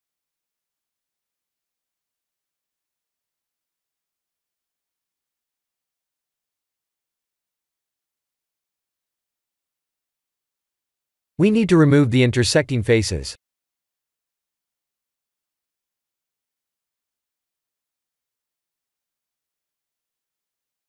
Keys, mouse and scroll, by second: 0.0 middle click, 0.1 middle click, 0.3 middle click, 0.6 middle click, 0.8 middle click, 1.3 Tab, 2.5 ctrl+r, 4.2 middle click, 4.7 3, 5.3 click, 6.5 shift+click, 7.2 click, 8.0 middle click, 8.5 x, 10.6-11.3 scroll up 2, 12.4 click, 12.8 middle click, 13.1 middle click, 13.3 middle click, 13.6 shift+z, 14.0 middle click, 14.5 middle click, 14.6 middle click, 14.7 middle click, 14.8 middle click, 15.3 click, 15.6 b, 16.7 middle click, 17.2 middle click, 18.1 middle click, 18.3 middle click, 18.9 c.